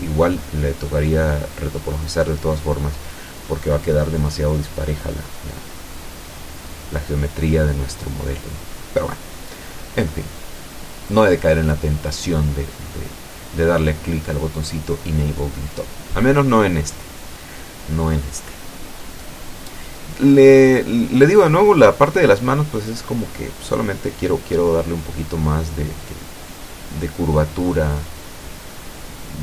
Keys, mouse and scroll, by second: 0.5 shift+middle click, 1.5 shift+middle click, 3.0 ctrl+click, 4.2 ctrl+middle click, 5.3-6.4 ctrl+drag, 6.8 middle click, 7.6 ctrl+click, 8.1 ctrl+click, 8.7 ctrl+click, 9.7 ctrl+click, 10.7 middle click, 11.5 ctrl+click, 13.6 ctrl+click, 14.0 ctrl+click, 14.6 ctrl+middle click, 15.5 ctrl+click, 16.3 ctrl+click, 16.9 ctrl+middle click, 18.1-20.3 ctrl+drag, 20.5 ctrl+click, 21.0 ctrl+click, 21.5 ctrl+middle click, 22.8-24.6 ctrl+drag, 24.8 ctrl+click, 26.3-28.8 ctrl+middle drag, 29.2 ctrl+click.